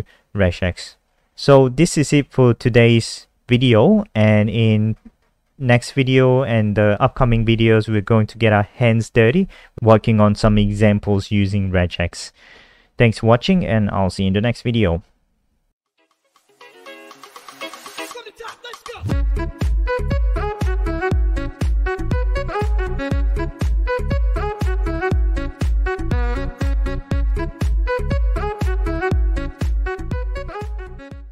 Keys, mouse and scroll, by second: 3.8-5.5 scroll up 21.